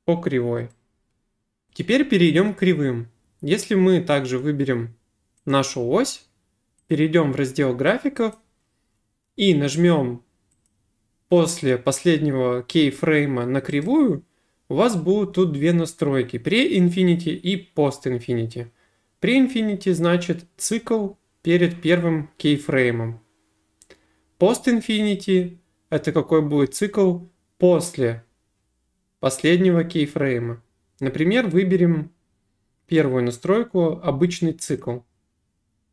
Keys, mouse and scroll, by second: 1.7 click, 5.5 click, 6.9 click, 8.4 click, 10.7 click, 13.8 right click, 34.8 click.